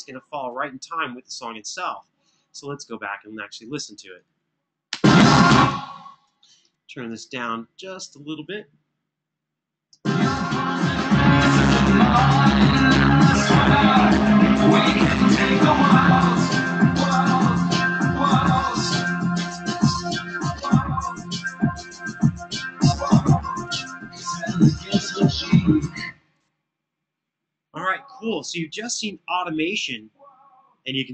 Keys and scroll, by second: 4.7 space, 5.3 space, 6.2 super+=, 9.6 space, 11.7 super+=, 25.8 space.